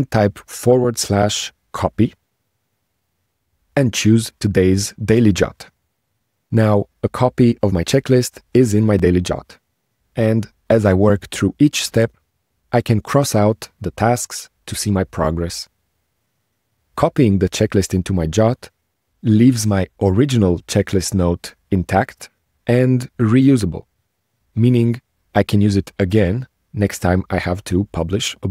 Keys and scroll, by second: 12.5 ctrl+shift+space, 16.0 ctrl+shift+space, 20.8 ctrl+shift+space.